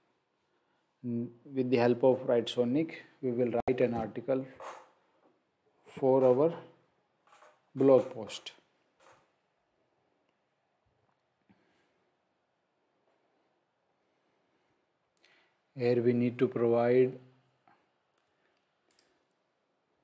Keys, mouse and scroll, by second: 18.9 click.